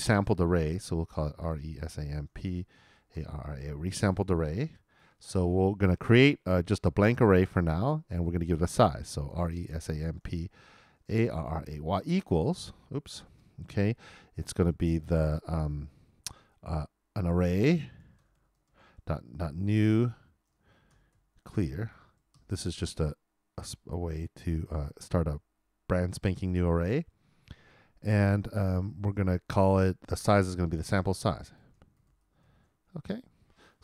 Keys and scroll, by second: 2.6-3.6 typing, 10.7-11.7 typing, 17.8-18.7 typing, 21.3-23.6 typing, 32.4-33.7 typing.